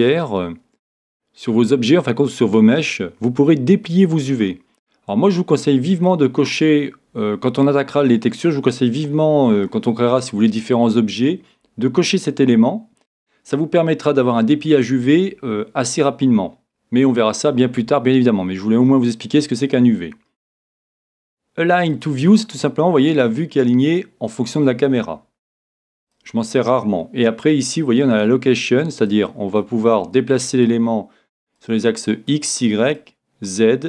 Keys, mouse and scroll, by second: 21.9-23.8 drag, 26.0-27.8 drag, 27.9 click, 29.1-30.9 drag, 31.6-33.8 drag.